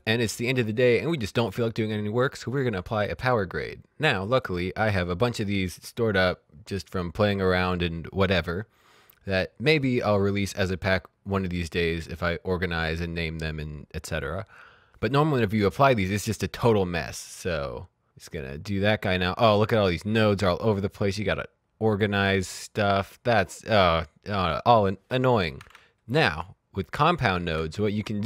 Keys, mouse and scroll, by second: 0.0 click, 2.9 click, 6.8 click, 11.3 click, 16.5 right click, 18.2 click, 20.3 click, 26.1 ctrl+z, 27.3 ctrl+z.